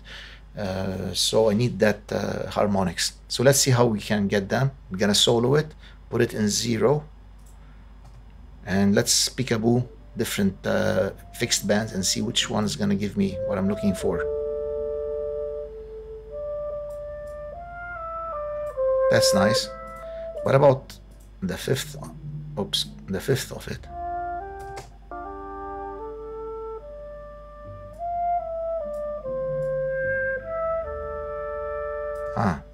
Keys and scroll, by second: 8.0 space, 24.6 space, 32.2 space.